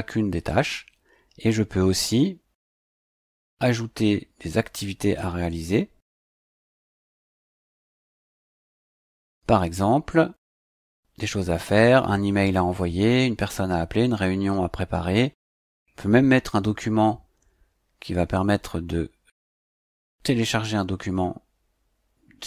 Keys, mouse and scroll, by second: 3.0 click, 8.1 click, 10.5 click.